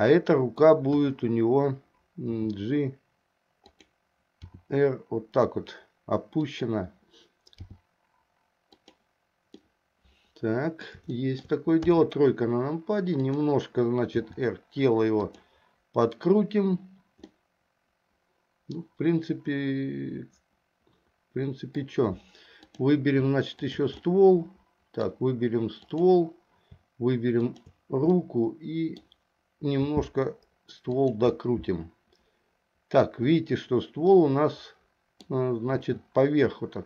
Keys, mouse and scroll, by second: 1.0 KP_1, 2.3 g, 4.6 r, 7.7 g, 9.7-11.0 middle drag, 11.2 shift+middle click, 12.0 KP_3, 14.3 r, 17.3-22.0 middle drag, 22.7 click, 23.7 shift+click, 24.1-25.2 middle drag, 27.5 shift+click, 28.3 middle click, 30.0 r, 31.5-33.2 middle drag, 34.3-35.5 middle drag, 35.9 r.